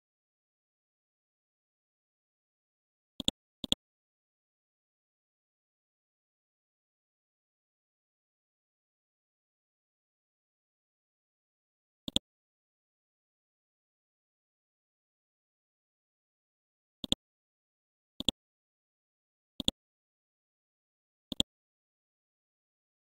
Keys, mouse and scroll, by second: 1.1-1.9 scroll up 1, 1.9 scroll down 1, 3.2 click, 4.0-4.6 scroll down 1, 4.6-5.4 scroll up 1, 5.4-7.0 scroll down 1, 7.0-7.9 scroll up 1, 8.7-9.0 scroll down 1, 12.0-16.3 drag, 19.1-19.5 scroll up 1, 19.5 click, 20.1 scroll up 1, 21.3 click.